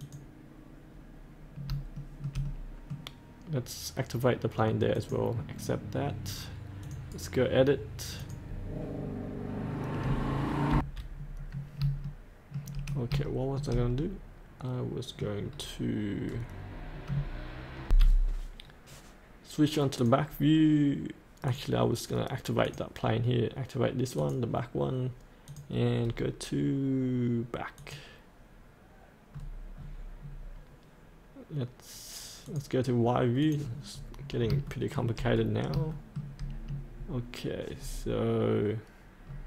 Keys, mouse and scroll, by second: 0.4 click, 1.9 shift+middle click, 2.4 middle click, 4.9 click, 7.1 right click, 8.2 click, 10.7 F8, 11.1-11.7 scroll down 1, 12.0 shift+middle click, 13.2 shift+middle click, 14.0 middle click, 15.4-16.2 scroll down 1, 17.8 F8, 18.6-19.9 scroll down 1, 26.0-27.8 scroll down 1, 27.8 click, 29.3-29.8 scroll down 1, 32.4-33.9 drag, 33.9 scroll up 1, 34.7 shift+middle click, 35.3-35.7 scroll down 1, 35.9 shift+middle click, 37.8-39.2 scroll up 1, 39.2-39.4 scroll down 1.